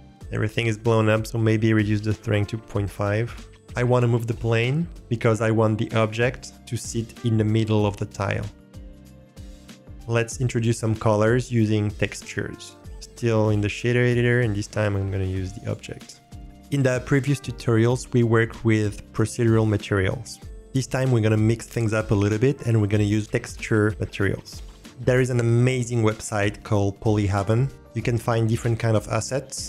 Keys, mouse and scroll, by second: 0.0 click, 0.9-3.2 drag, 8.7 alt+click, 8.7 middle click, 8.9 scroll up 2, 9.1 g, 12.8-13.6 drag, 14.0 click, 14.5-15.8 drag.